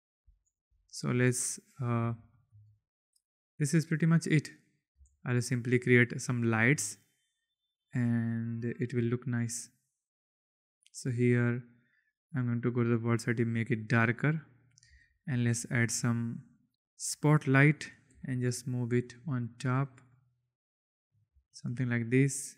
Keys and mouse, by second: 0.1 space, 2.2 shift+drag, 3.2 click, 5.0 shift+a, 6.4 click, 7.2 click, 7.6-8.9 drag, 9.1-10.2 drag, 10.9 click, 12.5 click, 15.3 shift+a, 18.1 g, 18.4 z, 20.3-21.3 drag, 21.6 shift+middle click.